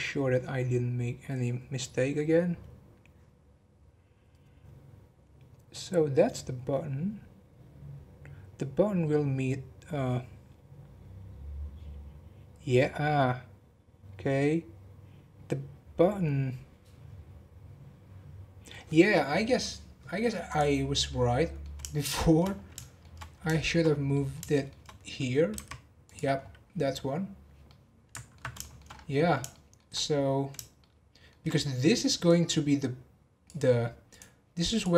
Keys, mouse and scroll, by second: 20.4 click, 20.8 scroll down 4, 21.1-22.5 middle drag, 22.5 scroll up 1, 22.7 shift+middle click, 23.2 scroll down 4, 23.5 shift+middle click, 23.8 scroll up 5, 24.1-25.5 middle drag, 25.5 g, 26.3-27.7 scroll down 7, 27.7-28.9 middle drag, 28.9 scroll up 1, 29.5 shift+middle click, 30.1-30.7 scroll up 1, 30.7-32.2 shift+middle drag, 32.2 click, 34.1 click.